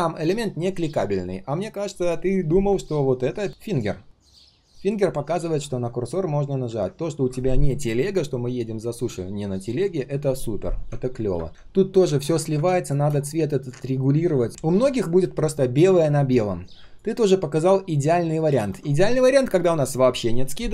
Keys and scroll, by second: 11.5 ctrl+z.